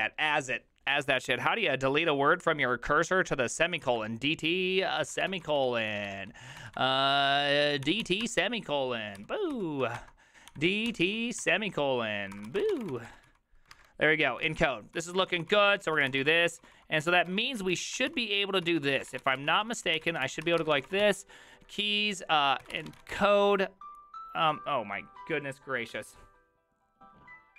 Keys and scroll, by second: 10.5 d, 12.2-13.4 typing, 14.5 alt+{, 15.0-23.6 typing.